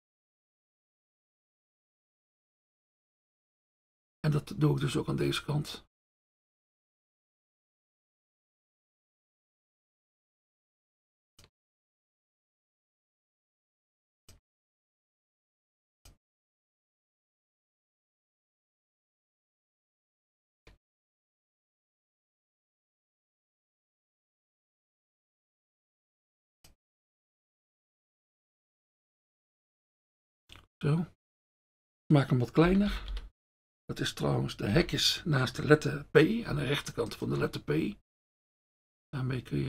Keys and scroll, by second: 32.9 [, 33.1 [, 34.7 [.